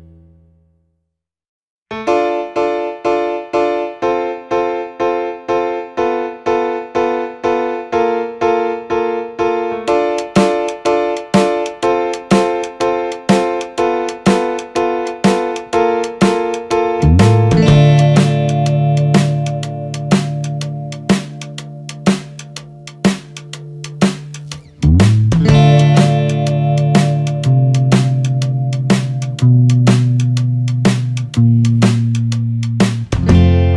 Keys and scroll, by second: 17.6 ctrl+-, 18.4 ctrl+z, 19.8 ctrl+=.